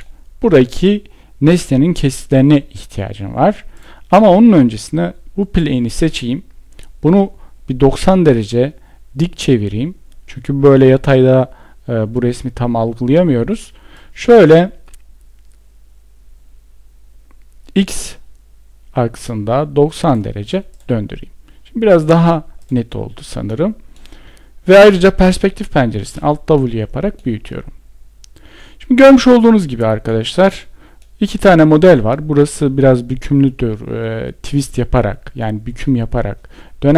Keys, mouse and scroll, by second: 24.9 alt+w.